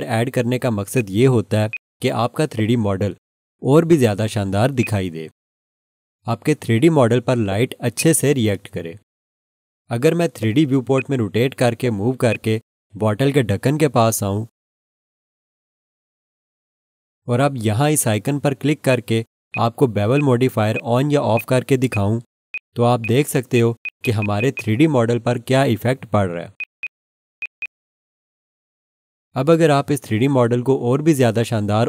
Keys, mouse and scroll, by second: 0.9 alt+click, 1.7 alt+shift+click, 2.4-2.8 scroll up 1, 4.8 alt+click, 7.3 scroll down 1, 7.7 scroll, 8.0 alt+click, 10.2 scroll up 1, 10.8 scroll, 10.9 alt+shift+click, 11.6 scroll up 1, 12.2 scroll, 12.3 alt+shift+click, 13.0-16.0 scroll up 1, 18.9 click, 23.8 double click, 26.6 click, 26.8 double click, 27.4 click, 27.6 double click.